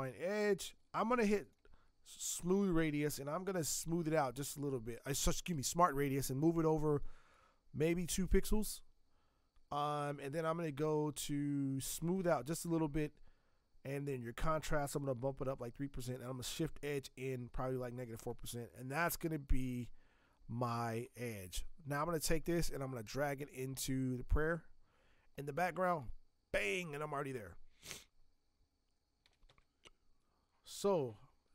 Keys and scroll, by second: 29.0-29.9 typing, 30.8 Escape.